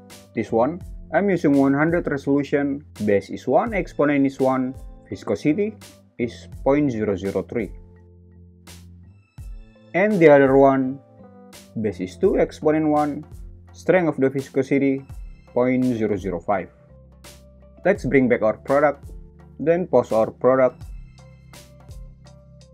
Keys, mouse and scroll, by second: 1.0 click, 2.8 space, 5.3 click, 7.2 space, 17.6 space, 19.3 Escape, 19.3 r, 19.3 g, 20.5 `, 21.7 g.